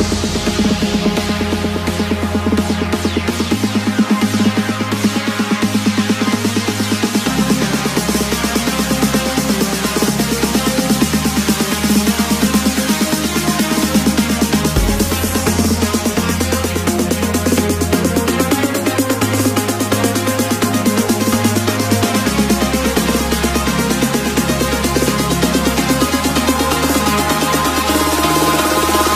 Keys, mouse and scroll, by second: 3.4 b, 7.6 b, 13.2 b, 15.9 b, 16.1 b, 16.9 b, 17.3 b.